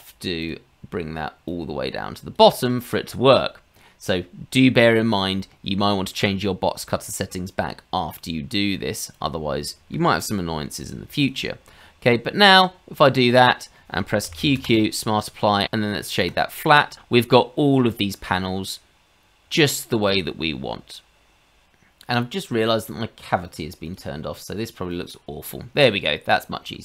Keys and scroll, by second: 10.8 h, 14.2 q, 14.4 q.